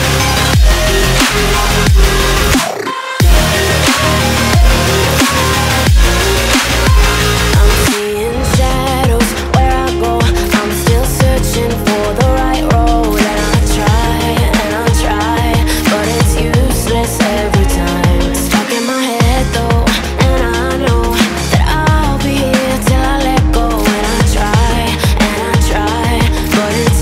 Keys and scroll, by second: 21.0 ctrl+j, 21.2 ctrl+z.